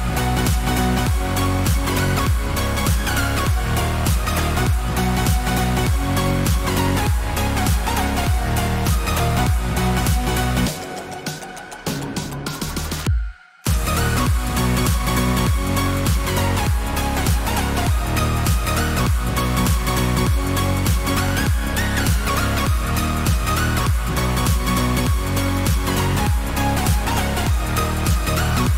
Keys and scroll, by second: 15.1 ctrl+alt+shift+e, 20.7 ctrl+shift+a.